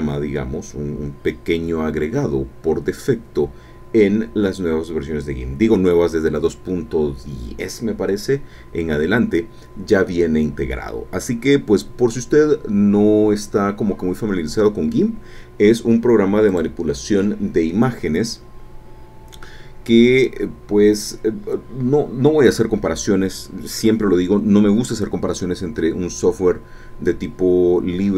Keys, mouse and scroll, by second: 16.5 click.